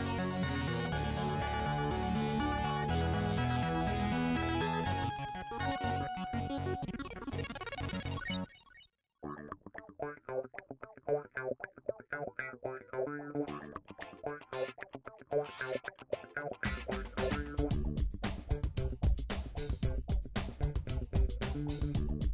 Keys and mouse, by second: 1.8-5.5 middle drag, 5.5 alt+click, 7.4-12.4 middle drag, 8.7 KP_7, 11.1 e, 12.4 click, 12.6-14.6 middle drag, 13.1 g, 15.2-17.0 middle drag, 17.1-18.1 drag, 18.1 shift+middle click, 18.4 shift+click, 18.5-20.7 shift+middle drag, 19.3 KP_3, 20.7-21.5 drag, 21.5-22.3 middle drag, 22.2 c.